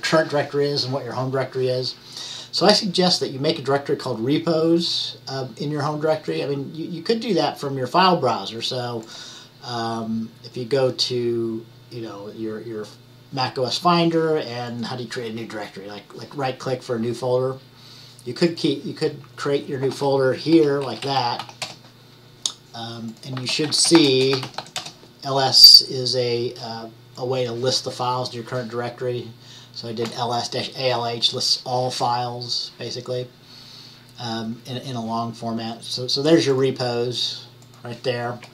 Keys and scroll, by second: 20.0-22.0 typing, 23.7-25.2 typing.